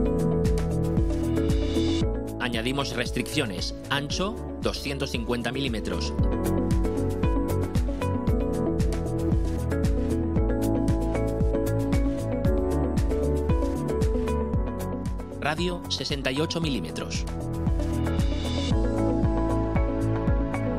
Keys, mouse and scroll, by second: 0.0 right click, 4.4 click, 6.1 2, 6.4 5, 7.4 Return, 9.5 click, 10.9 click, 12.2 click, 14.3 click, 16.2 6, 16.5 8, 17.3 Return, 18.8 click.